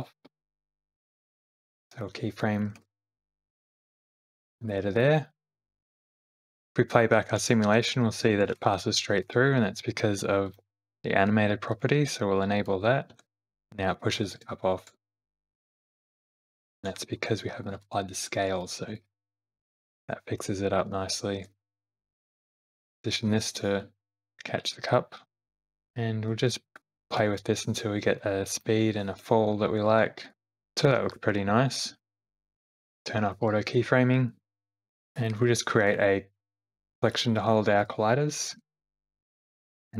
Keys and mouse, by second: 1.9 click, 6.1 click, 6.4 space, 8.1 space, 8.5 shift+Left, 11.8 click, 12.7 click, 13.1 space, 14.1 space, 15.1 shift+Left, 16.6 click, 17.8 ctrl+a, 19.3 space, 20.9 space, 21.4 shift+Left, 22.6 shift+middle click, 23.1 g, 23.8 space, 24.3 click, 25.4 space, 25.5 shift+Left, 25.5 space, 25.8 shift+Left, 26.6 shift+click, 26.9 click, 27.2 space, 27.6 middle click, 28.4 middle click, 28.8 space, 29.1 shift+middle click, 29.5 middle click, 30.5 shift+Left, 30.5 space, 31.9 space, 32.1 shift+Left, 32.4 space, 32.9 space, 33.0 click, 35.9-36.9 drag, 37.6 shift+click, 38.5 m, 38.7 l, 39.2 Return.